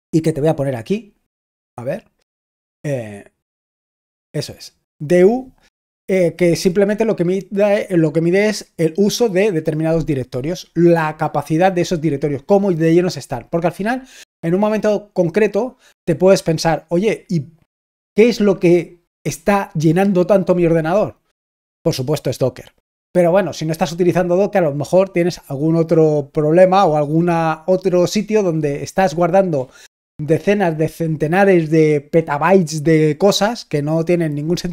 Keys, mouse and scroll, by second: 0.0 click, 1.2-2.8 scroll down 2, 2.8-3.3 scroll down 1, 3.3-9.4 scroll up 3.